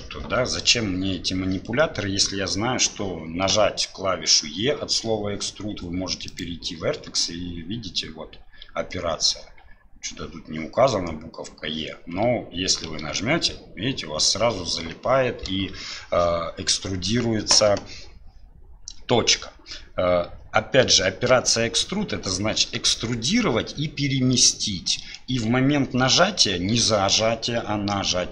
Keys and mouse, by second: 6.4-11.9 drag.